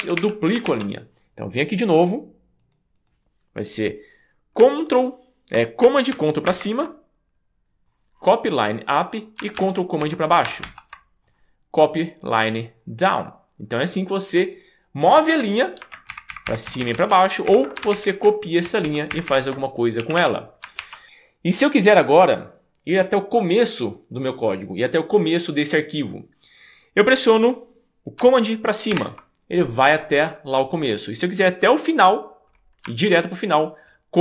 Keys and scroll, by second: 0.0 d, 0.2 d, 0.6 super+s, 6.5 alt+super+Up, 10.0 alt+super+Down, 10.6 alt+super+Down, 15.4 Up, 16.1 ctrl+super+Up, 16.7 ctrl+super+Down, 17.5 ctrl+super+Up, 18.7 ctrl+super+Down, 19.1 ctrl+super+Up, 20.0 d, 20.2 d, 20.8 super+s, 29.0 super+Up.